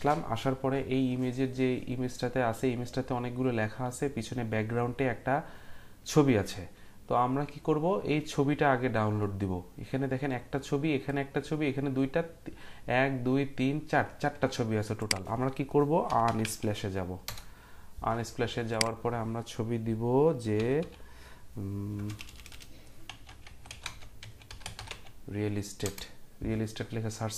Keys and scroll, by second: 16.0-16.9 typing, 17.2 Return, 19.4-25.4 typing, 25.8 Return.